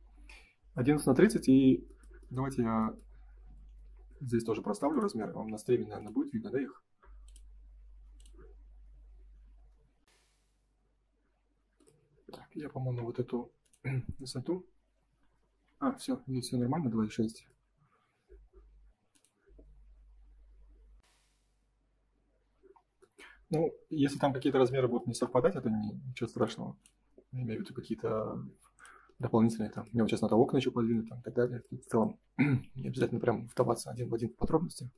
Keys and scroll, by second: 10.0 Print, 15.8 Escape, 16.6 space, 32.6 F3, 33.8 F4.